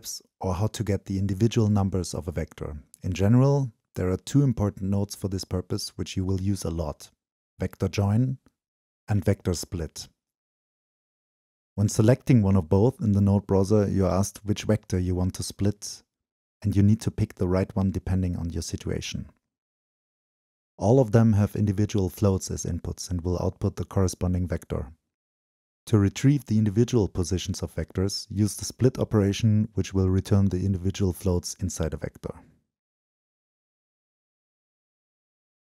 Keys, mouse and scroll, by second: 0.0-2.1 drag, 2.8 right click, 3.1 right click, 3.8 right click, 4.6-6.7 drag, 7.6-12.2 drag, 12.2-13.3 middle drag, 13.3-13.9 drag, 13.9 middle click, 14.4-18.7 drag, 18.7-19.6 middle drag, 19.6-20.2 drag, 20.2-20.8 middle drag, 20.8-21.4 drag, 21.4-22.2 middle drag, 22.2-22.7 drag, 22.7-23.3 middle drag, 23.3-25.0 drag, 25.0-26.4 middle drag, 26.4-26.8 drag, 26.8-27.7 middle drag, 27.7-28.2 drag, 28.2-29.0 middle drag, 29.0-32.5 drag, 32.5-34.2 right drag.